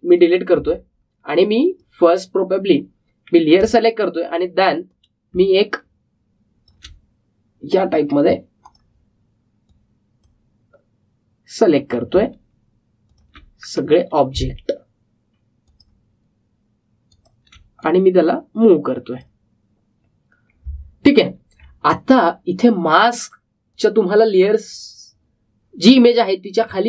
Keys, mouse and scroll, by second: 1.1 click, 4.8 alt+scroll up 1, 5.8-13.1 drag, 14.4-15.3 scroll down 1, 16.6-21.9 shift+drag, 21.9-22.6 alt+scroll up 1, 23.1 click.